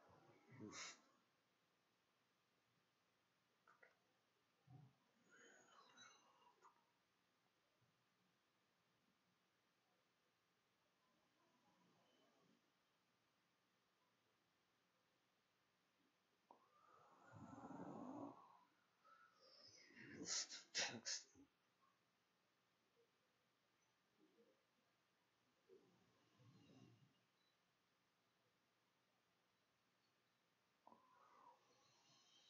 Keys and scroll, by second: 28.4-29.8 typing, 32.1 i.